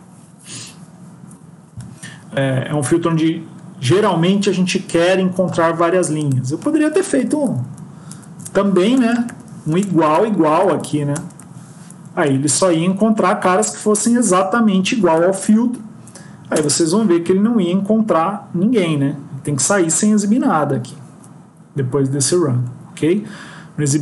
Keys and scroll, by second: 7.5 ctrl+shift+Right, 8.0 ctrl+shift+Left, 9.8 Right, 10.0 Right, 10.7 Right, 11.0 BackSpace, 13.3 ctrl+s.